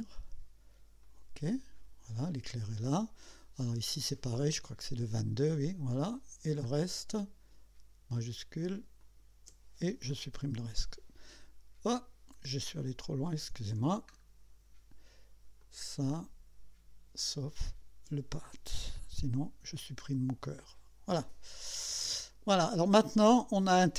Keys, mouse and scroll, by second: 1.0 click, 3.3 scroll down 2, 4.6 click, 5.7 click, 6.7 scroll up 2, 9.0 shift+click, 10.3 Delete, 13.1 ctrl+z, 14.2-14.5 scroll down 2, 15.6 click, 16.2 scroll up 2, 17.7 shift+click, 20.6 Delete, 21.7 click, 23.0 click.